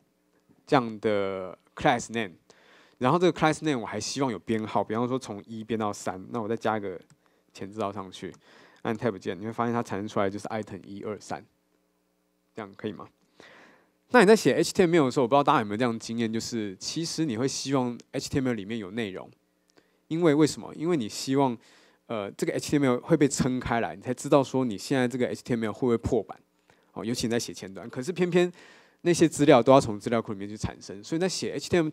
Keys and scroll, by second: 9.0 Tab, 13.4 super+z.